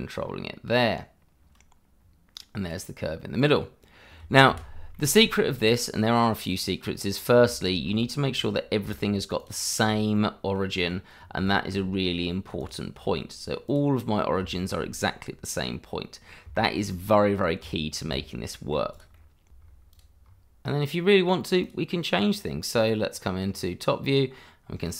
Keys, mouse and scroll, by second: 0.2-2.0 scroll up 1, 2.0-2.7 scroll down 1, 2.7 click, 4.5 shift+z, 4.9 shift+middle click, 5.2-6.3 scroll up 1, 6.3 click, 6.8-7.1 scroll up 1, 7.8-8.3 scroll up 1, 8.3 click, 9.4 click, 10.1 middle click, 10.8-11.2 scroll down 1, 11.4 shift+middle click, 12.6 shift+click, 13.3 click, 14.0-14.4 scroll down 1, 14.4 shift+middle click, 16.1 scroll down 1, 16.5 shift+middle click, 17.3-17.6 scroll down 1, 18.0 shift+z, 18.5 shift+middle click, 19.1 middle click, 19.5 shift+z, 19.6-19.9 scroll up 1, 19.9 click, 20.2-21.3 scroll up 1, 21.6 click, 22.2-23.1 scroll down 1, 23.1 click, 23.5-24.3 scroll down 1, 24.3 scroll up 1, 24.8 click.